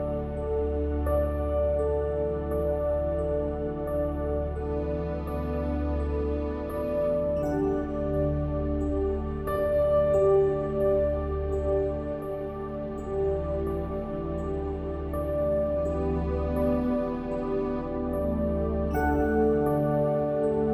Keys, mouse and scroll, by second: 0.9 click, 1.3 s, 3.5 Tab, 4.1 Tab, 4.3 ctrl+r, 4.9 ctrl+r, 5.7 Tab, 6.1 Tab, 6.9 middle click, 7.9 middle click, 9.0-10.3 middle drag, 11.5 e, 12.6 s, 14.6 e, 15.7 e, 17.3 e, 18.0 e, 19.2 middle click, 19.8-20.7 typing.